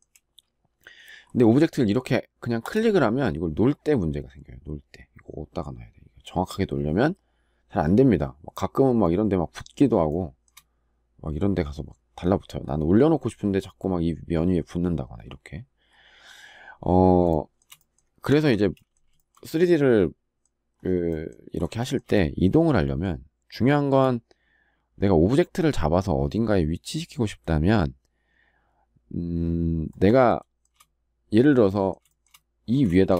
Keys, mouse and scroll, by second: 9.8 shift+middle click, 17.0 shift+middle click, 18.1 Escape, 18.9 shift+middle click, 21.5 shift+middle click, 30.0 shift+middle click, 31.8 shift+middle click, 32.0 shift+double middle click, 32.8 shift+middle click.